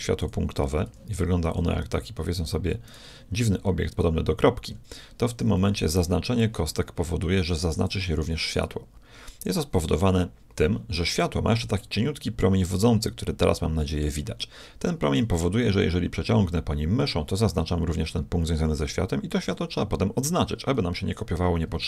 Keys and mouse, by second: 0.9 g, 2.8-4.1 right drag, 4.6-6.5 middle drag, 5.6 a, 5.9 b, 11.7-13.3 middle drag, 13.3 middle click, 13.5 middle click, 14.3-16.1 middle drag.